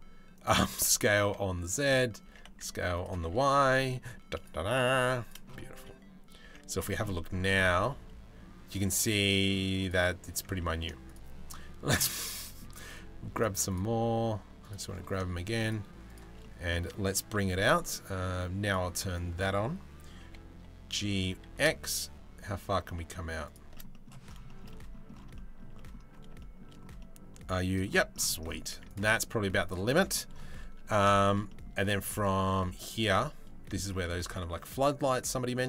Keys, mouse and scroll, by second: 0.2 s, 1.9 s, 4.2 s, 4.2 g, 5.4 z, 6.1 Tab, 6.7 middle click, 7.4 middle click, 9.0 middle click, 9.9 Tab, 10.2 middle click, 10.7-12.2 shift+middle drag, 13.3-14.5 shift+middle drag, 16.0 middle click, 16.5 middle click, 18.2 middle click, 18.7 middle click, 19.8 g, 23.5 middle click, 24.1 shift+middle click, 24.3 middle click, 25.4 middle click, 26.0 shift+middle click, 26.6 middle click, 28.4 Tab, 28.5 drag, 28.7-29.1 middle drag, 29.3 click, 29.5 middle drag, 30.8 shift+middle drag, 31.1 click, 31.5 middle drag, 32.5 click, 34.0 shift+a.